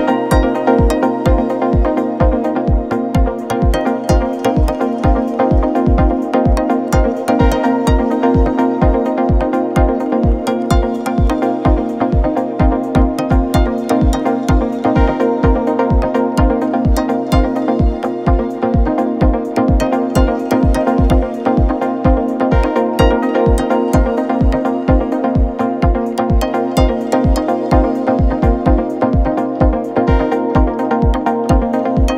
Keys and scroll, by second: 0.3 ctrl+z, 2.5 ctrl+-, 4.9 space, 7.0 ctrl+z, 7.2 ctrl+=, 12.2 ctrl+z, 16.3 ctrl+z, 17.9 ctrl+z, 25.7 ctrl+-, 28.7 space, 31.3 space, 31.9 space.